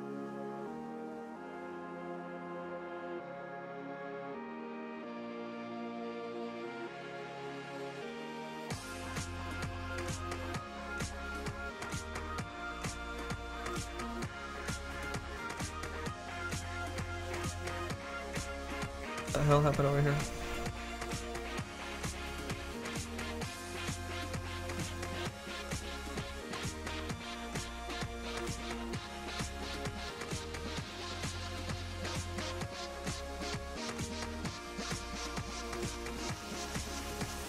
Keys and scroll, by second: 20.8 s, 32.4 s, 36.0 s.